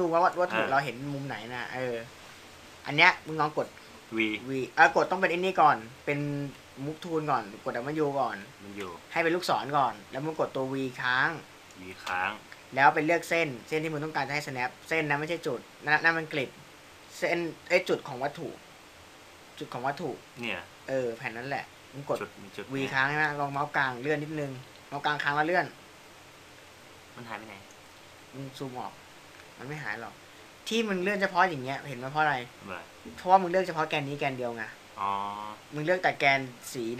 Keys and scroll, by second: 4.7 v, 8.8 w, 12.4 v, 17.0 v, 25.2 v.